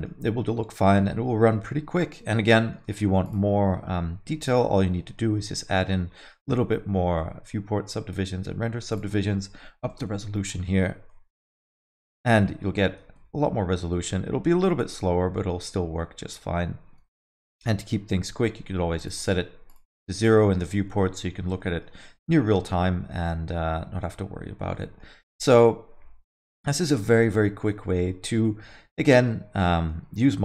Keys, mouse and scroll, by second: 0.5 space, 2.4 space, 2.6 middle click, 2.8 alt+middle click, 3.2 click, 4.4 click, 4.9 middle click, 5.3 scroll up 2, 5.5 alt+middle click, 5.8 middle click, 6.1 scroll up 2, 6.3 alt+middle click, 8.9 click, 11.1 middle click, 11.4 alt+middle click, 11.6 middle click, 12.8 scroll up 1, 13.0 space, 17.2 space, 17.2 middle click, 17.6 alt+middle click, 19.0 click, 19.6 click, 19.7 click, 20.1 middle click, 20.3 scroll down 1, 20.4 alt+middle click, 20.7 space, 21.0 middle click, 21.3 scroll down 1, 21.7 alt+middle click, 24.8 middle click, 25.2 scroll down 1, 28.9 middle click, 29.6 alt+middle click.